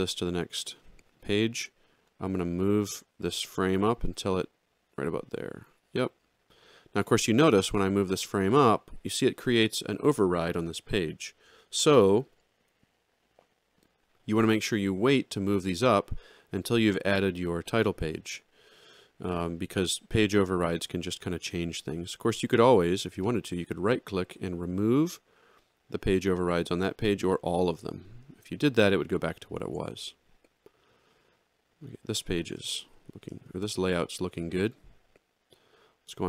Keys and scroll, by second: 29.6 ctrl+z, 33.5 alt+shift+].